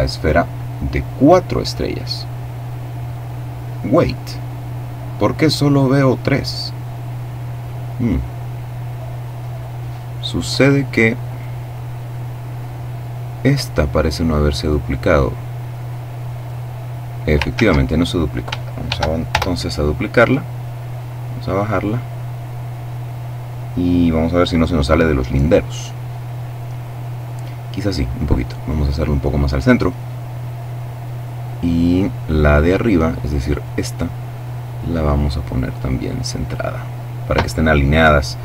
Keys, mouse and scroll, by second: 7.9-8.7 scroll up 2, 8.8-9.3 scroll down 2, 10.7 right click, 13.1-13.7 scroll down 2, 14.7 click, 17.0 ctrl+z, 18.3 shift+d, 18.8 shift+Return, 19.7-21.7 drag, 27.2-28.6 drag, 31.2-31.8 scroll up 2, 32.9 right click, 34.0-36.3 drag, 36.3-36.9 scroll down 1.